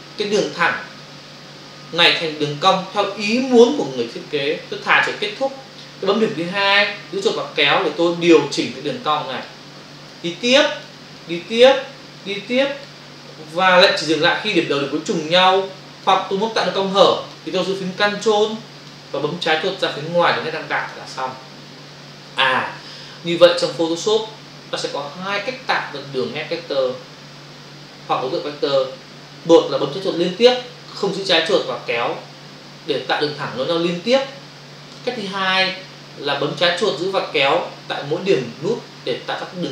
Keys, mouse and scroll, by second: 6.5 click, 10.1 click, 11.1 click, 12.2 click, 15.1 click, 17.0 click, 17.7 click, 18.6 click, 19.0 click, 20.7 ctrl+click, 20.9 ctrl+click.